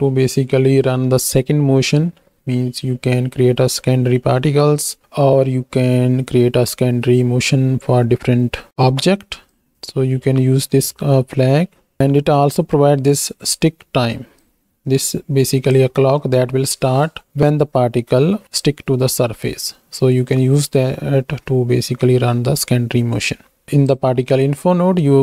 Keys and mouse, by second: 9.5 click, 14.3-15.8 drag, 16.1 middle drag, 23.6 click.